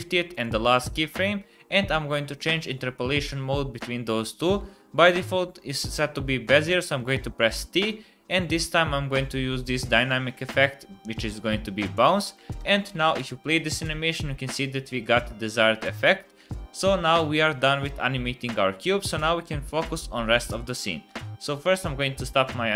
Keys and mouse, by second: 0.3 click, 7.5 t, 12.6 space, 21.1 space, 21.4 click.